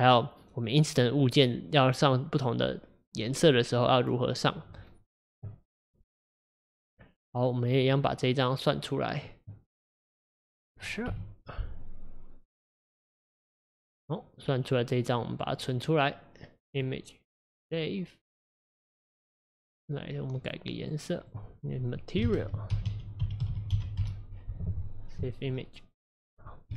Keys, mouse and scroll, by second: 13.1 F12.